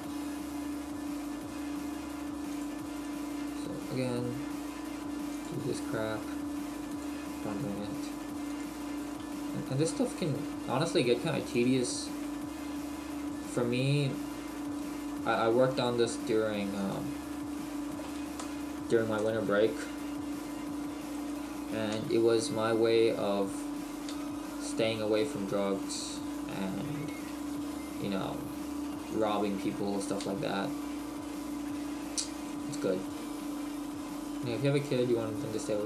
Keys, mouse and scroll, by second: 2.6 click, 2.9 right click, 3.4 g, 5.4 click, 5.9 right click, 6.1 g, 7.0 click, 8.1 g, 8.6 click, 9.0 right click, 9.8 click, 10.2 right click, 11.7 click, 11.9 right click, 12.4 click, 13.7 right click, 14.0 g, 16.9 click, 21.2 right click, 22.0 g, 23.6 right click, 24.1 g, 26.1 click, 27.1 right click, 27.3 g, 29.2 click, 30.0 right click, 30.2 g, 32.5 click, 33.0 right click, 33.3 g.